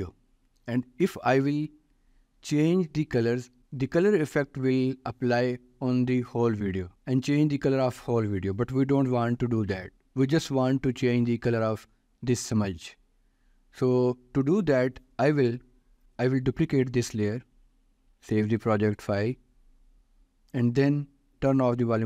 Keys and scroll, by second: 17.7 ctrl+d, 18.8 ctrl+s.